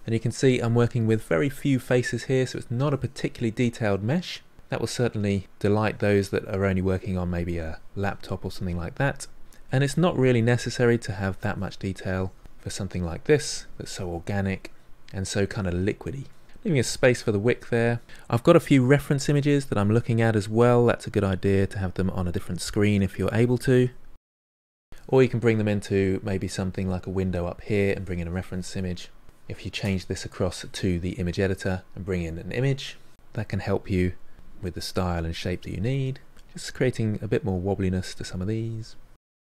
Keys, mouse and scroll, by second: 1.9-6.3 middle drag, 6.3 click, 7.0 middle click, 7.1 click, 7.5 middle click, 8.2-9.4 drag, 9.4 middle click, 9.7 click, 10.0 middle click, 10.3-11.4 drag, 11.4 middle click, 11.7 click, 12.6 middle click, 13.0 click, 13.8 middle click, 14.7 click, 15.1-16.8 middle drag, 16.8 ctrl+click, 17.3 middle click, 18.0 click, 18.7-20.4 middle drag, 20.4 click, 21.3 middle click, 21.5-23.0 drag, 23.0 middle click, 23.2 click, 23.9 middle click, 24.2-29.7 drag, 33.1 middle click, 33.5 click, 34.3 middle click, 34.5-35.7 drag, 35.7 middle click, 36.0 click, 36.9 middle click, 37.0 click, 37.4 middle click, 37.5 click, 38.1 middle click, 38.3 click, 38.8 middle click, 39.1 click.